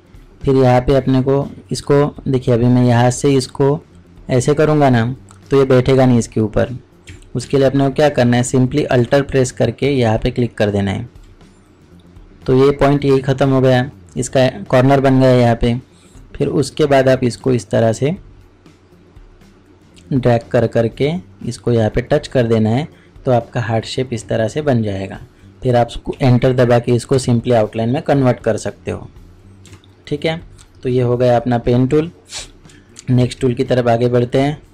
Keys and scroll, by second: 7.4 ctrl+z, 8.9 ctrl+z, 33.1 ctrl+Tab.